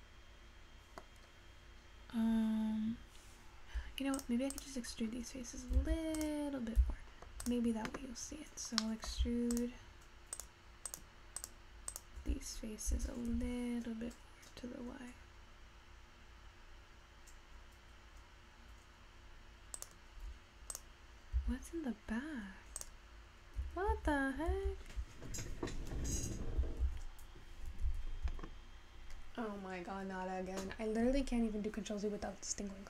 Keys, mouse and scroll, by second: 6.3 click, 9.0 middle click, 9.8-12.9 drag.